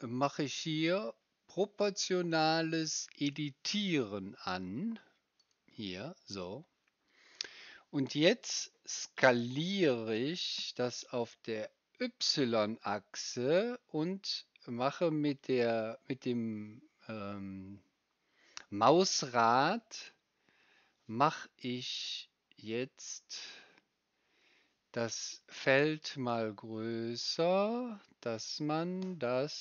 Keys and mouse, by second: 9.7 s.